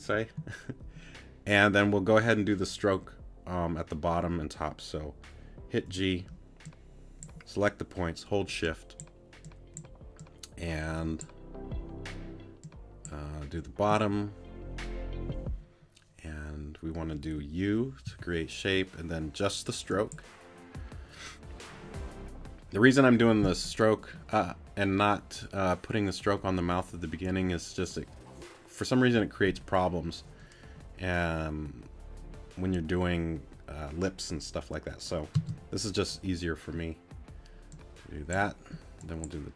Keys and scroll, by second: 5.9 g, 18.1 u, 35.3 space.